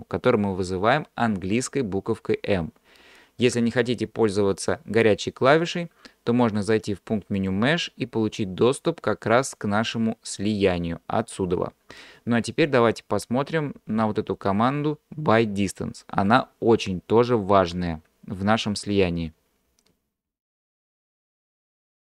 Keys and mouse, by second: 7.6-22.0 drag.